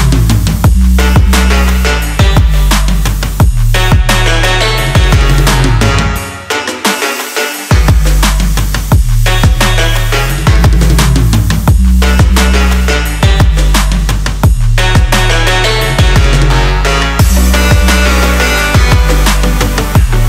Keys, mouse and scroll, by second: 3.6-7.6 drag, 8.2 click, 13.4 click, 16.7 x, 19.3-20.2 drag.